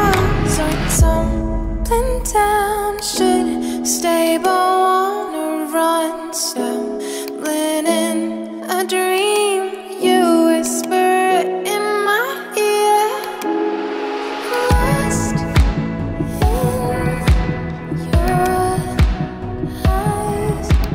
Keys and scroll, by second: 15.7 ].